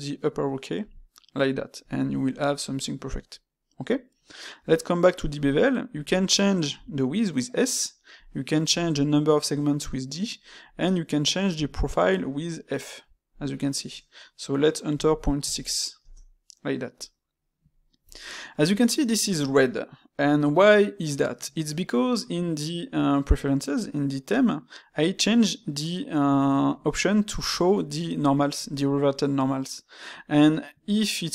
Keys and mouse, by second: 2.2-5.2 shift+middle drag, 17.1-21.3 middle drag, 21.7-24.7 middle drag, 26.0-31.3 middle drag.